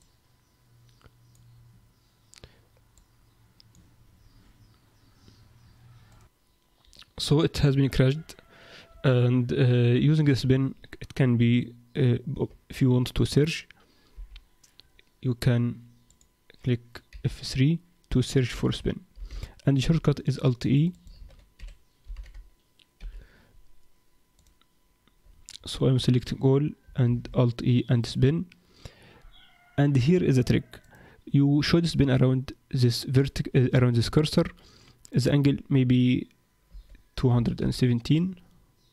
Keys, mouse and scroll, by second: 0.0 click, 3.0 click.